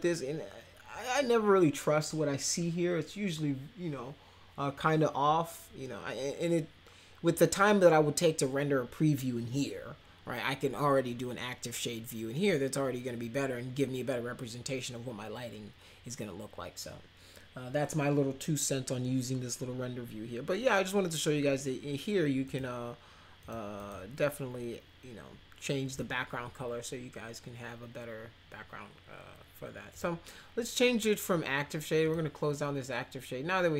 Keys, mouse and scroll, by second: 22.4 click, 23.4 click, 23.7 click, 29.9 click, 32.0 click.